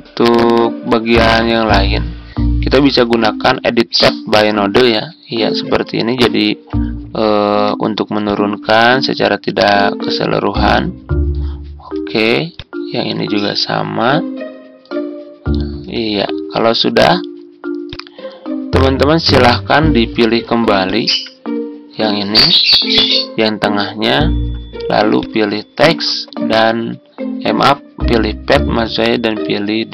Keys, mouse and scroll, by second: 22.2 ctrl+z.